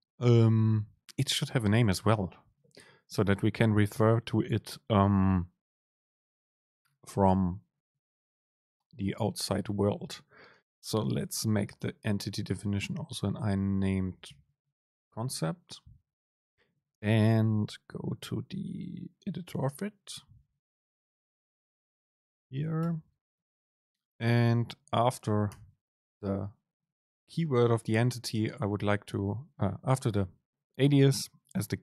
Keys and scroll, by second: 15.4 super+space, 22.9 Return, 23.6 super+space.